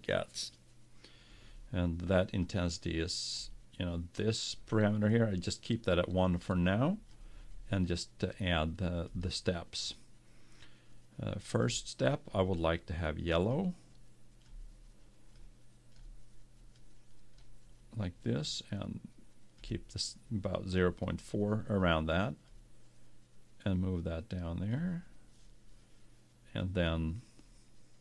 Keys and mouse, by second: 2.5-4.3 drag, 6.5-8.4 drag, 9.1-11.1 drag, 11.7-13.6 drag, 22.5-24.3 drag.